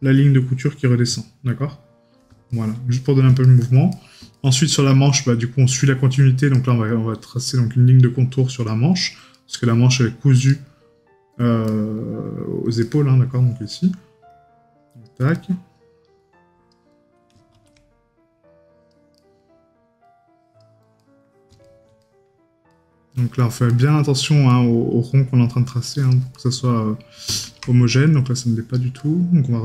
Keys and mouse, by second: 1.2 right click, 2.6 right click, 6.6 right click, 9.4 right click, 15.4 right click, 19.2 right click, 21.1 right click, 26.4 right click, 29.1 right click.